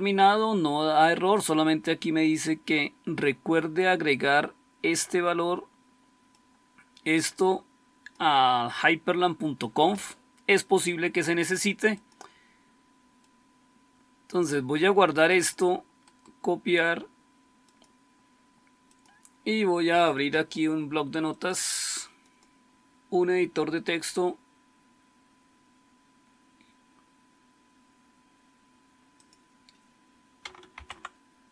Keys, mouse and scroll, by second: 22.4-23.1 typing, 30.7 ctrl+v.